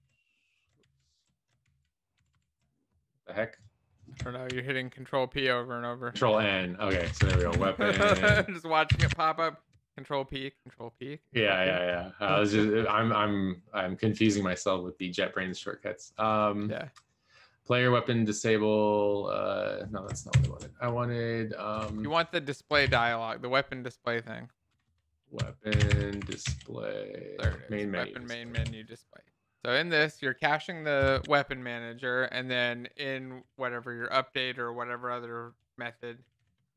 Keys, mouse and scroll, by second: 0.3 ctrl+p, 2.6 ctrl+p, 6.2 ctrl+n, 6.9-9.7 typing, 11.1 ctrl+s, 20.7 ctrl+n, 21.8-26.8 typing, 27.6 Return, 29.1 ctrl+s, 31.2 Return, 31.3 Up, 31.8 Tab, 34.7 alt+shift+f, 35.5 ctrl+s, 35.5 Tab, 35.8-36.7 typing.